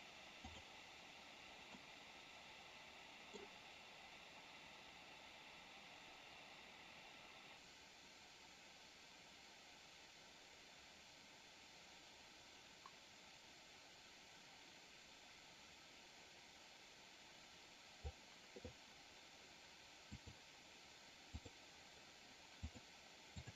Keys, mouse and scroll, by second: 0.3 click, 1.7-3.3 middle drag, 7.5-18.1 drag, 20.1 click, 21.3 click, 22.6 click.